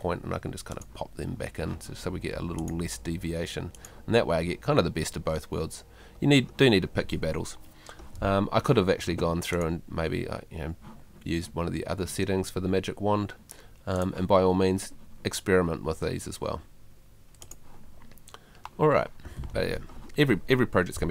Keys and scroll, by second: 19.4 Escape.